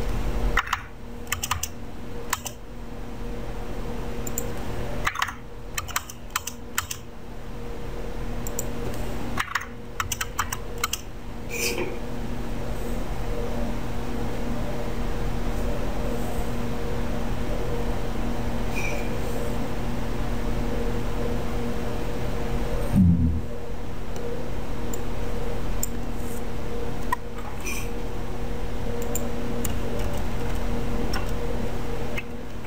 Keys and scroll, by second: 0.7 BackSpace, 1.4 space, 5.2 BackSpace, 5.9 space, 9.5 BackSpace, 10.1 space, 27.6 ctrl+c, 30.2 space.